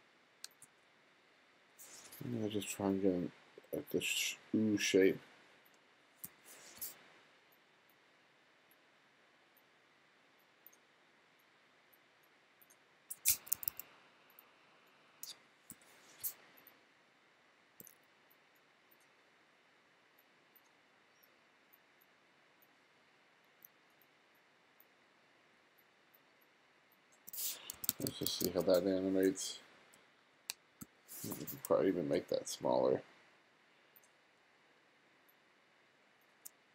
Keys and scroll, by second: 1.0 BackSpace, 6.3 BackSpace, 13.4 2, 15.8 BackSpace, 27.8 1, 29.5 [, 30.0 ], 30.5 [, 30.8 ].